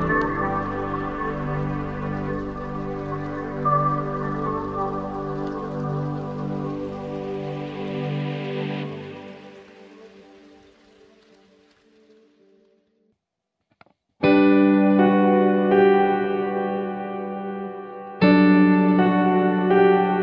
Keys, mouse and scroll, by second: 0.9 click, 2.2 click, 4.3 click, 15.3-16.8 drag, 17.4-19.3 drag, 19.8-20.2 scroll up 4.